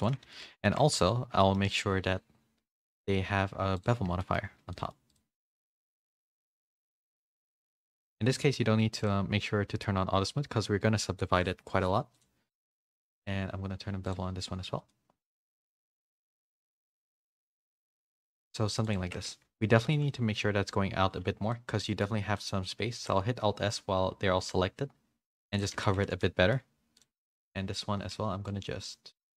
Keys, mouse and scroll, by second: 0.2 a, 0.4 a, 0.6 middle click, 1.4 middle click, 1.6 middle click, 3.0 click, 4.2 shift+middle click, 4.6 a, 4.7 middle click, 6.5 click, 8.9 click, 12.2-14.1 drag, 16.0 click, 16.2 click, 16.8 middle click, 17.4-18.4 middle drag, 17.4 a, 19.0 Tab, 19.3 a, 19.9 shift+middle click, 21.5 middle click, 22.3 middle click, 22.9 alt+s, 25.7 Tab, 25.9 a, 26.2 middle click, 26.2 a, 28.4-29.3 shift+drag.